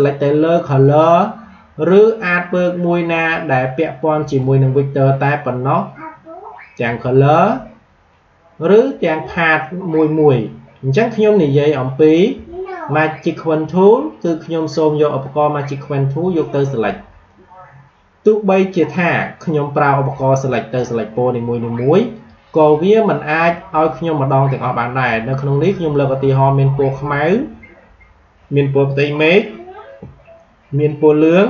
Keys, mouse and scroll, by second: 0.7-6.7 drag, 7.2 click, 22.1 click.